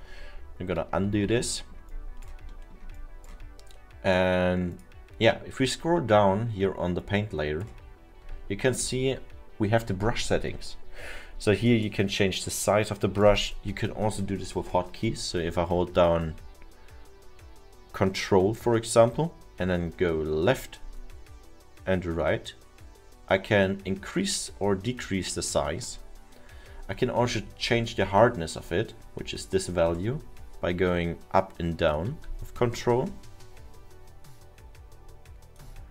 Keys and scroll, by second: 0.8 ctrl+z, 1.0 ctrl+z.